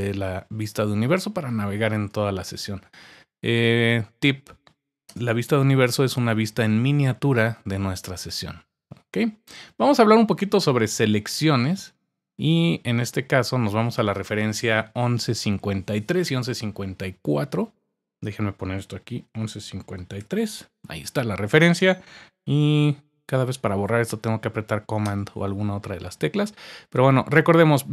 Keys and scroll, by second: 5.1 Return, 19.3-20.7 typing.